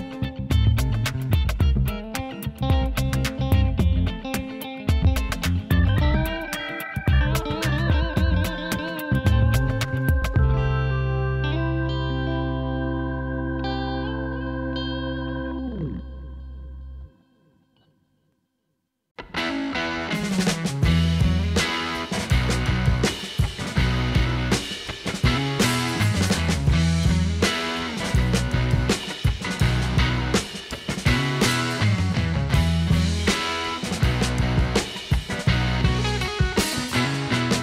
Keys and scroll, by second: 17.2 ctrl+alt+shift+e.